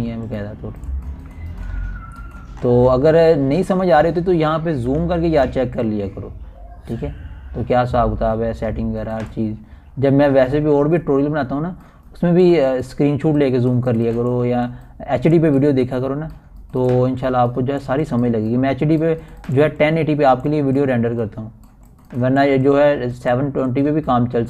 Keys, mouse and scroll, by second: 0.0-2.6 typing, 2.3 click, 2.9 click, 3.7 scroll down 1, 4.1 typing, 5.2 scroll up 1, 6.0-6.3 typing, 7.5-10.7 typing, 8.4-12.1 drag, 12.1 scroll down 1, 12.1-13.3 typing, 13.6-15.1 drag, 15.1-16.1 typing, 15.3-24.4 drag.